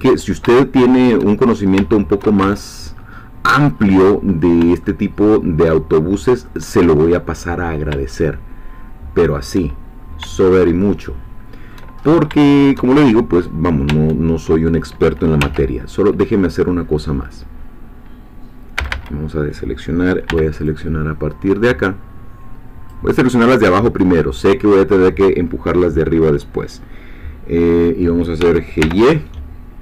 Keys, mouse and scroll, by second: 0.6 shift+middle click, 1.5-1.9 shift+scroll up 4, 1.9 shift+middle click, 2.5 shift+Tab, 2.9-3.7 shift+scroll up 1, 3.7-4.3 scroll down 1, 4.8-6.6 shift+middle drag, 8.1-9.5 shift+middle drag, 10.8-12.0 shift+middle drag, 12.0 shift+scroll up 1, 12.5 shift+middle click, 13.9 Tab, 15.4 1, 18.8 a, 20.3 b, 20.7-23.1 drag, 28.4 g, 28.8 y.